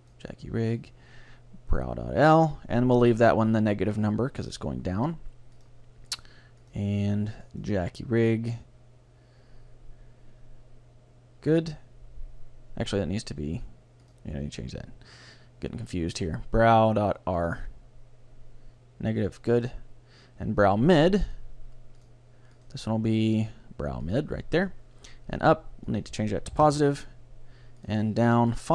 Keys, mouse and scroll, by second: 5.6-8.6 drag, 14.1-15.9 drag, 19.6-24.4 drag, 25.9-27.7 drag, 27.9-28.7 drag.